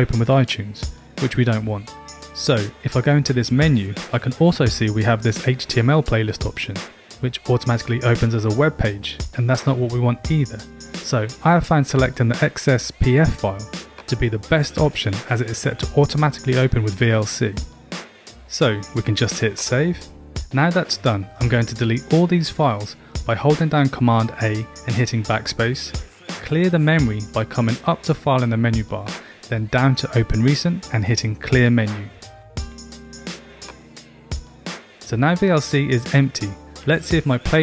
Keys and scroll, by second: 25.8 super+BackSpace.